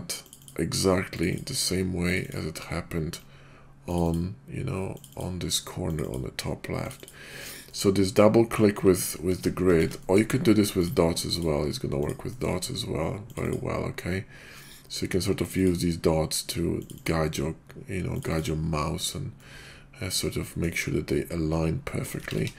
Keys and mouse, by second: 1.1 ctrl+click, 2.0 ctrl+click, 3.9 ctrl+click, 4.1-5.0 ctrl+drag, 5.9 ctrl+click, 6.8 ctrl+click, 7.2 ctrl+click, 7.7-8.5 middle drag, 10.0 middle click, 10.7-11.4 drag, 11.9 click, 12.2 middle drag, 13.3 ctrl+click, 13.5 ctrl+click, 15.4 ctrl+click, 16.8 ctrl+click, 18.2 ctrl+click, 19.4-20.6 middle drag, 21.8 middle drag, 22.2 ctrl+z, 22.4 ctrl+z.